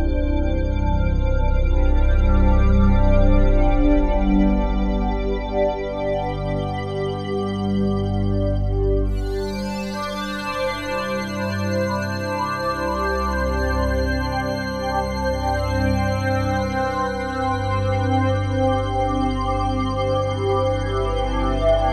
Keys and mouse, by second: 2.8 Tab, 3.2-6.3 alt+drag, 6.3 s, 6.9 click, 7.8 3, 9.4 Tab, 10.7 click, 11.7 click, 13.3 click, 14.4 s, 15.6 click, 17.5 click, 18.1 click, 18.8 click, 20.7 typing.